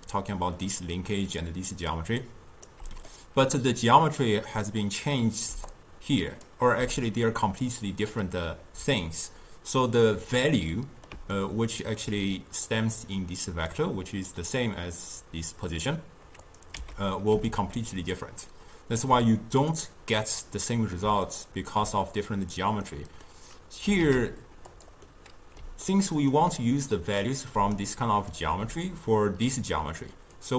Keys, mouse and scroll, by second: 0.7-1.3 d, 1.4 click, 2.0 d, 2.2 d, 2.3 right click, 2.8 d, 3.2-5.5 middle drag, 5.5 d, 5.8 click, 6.5-6.8 d, 10.6-12.8 middle drag, 12.8 drag, 14.2 click, 15.3-16.6 drag, 16.8 x, 17.4 d, 17.5 click, 18.2-18.5 d, 19.1 d, 19.8-21.1 middle drag, 21.3-24.1 ctrl+middle drag, 24.1 ctrl+a, 25.1-27.7 middle drag, 27.7 d, 27.9 click, 28.4-30.4 d, 30.5 click.